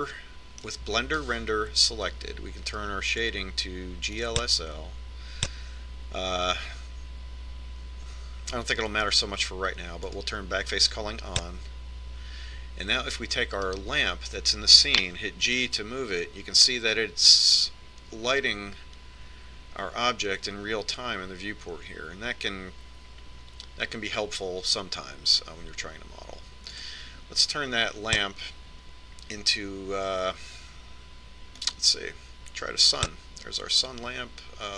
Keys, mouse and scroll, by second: 2.6 middle click, 4.3-6.1 drag, 11.3-13.1 drag, 14.9-16.6 right drag, 16.7 g, 33.4-34.7 drag.